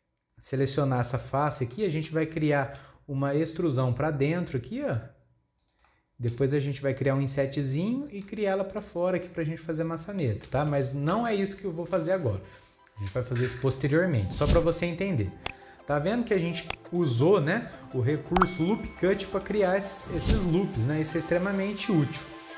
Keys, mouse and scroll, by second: 1.2 click, 1.5 scroll down 2, 1.7 middle click, 2.3 scroll up 3, 2.6-3.6 shift+middle drag, 3.6 e, 5.9-7.2 middle drag, 7.2 |, 9.2-10.5 middle drag, 10.5 ctrl+z, 10.8 ctrl+z, 11.1 ctrl+z, 11.5 scroll down 2, 12.0 alt+a, 12.7-14.2 scroll down 1, 14.2 scroll down 1, 14.6-17.2 middle drag, 17.2-17.8 scroll up 1, 17.8-20.8 middle drag.